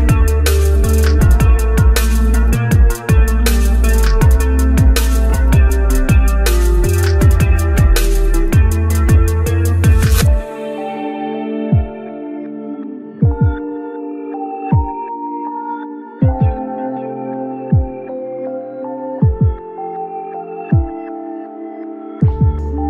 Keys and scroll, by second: 15.7 ctrl+z.